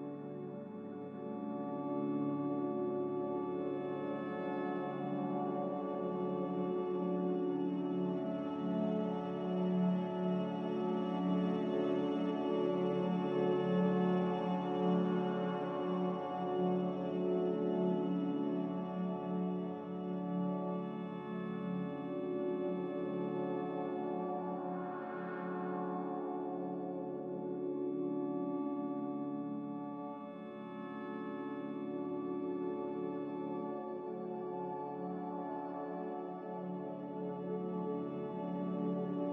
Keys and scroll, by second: 24.8 z, 26.7 ctrl+z.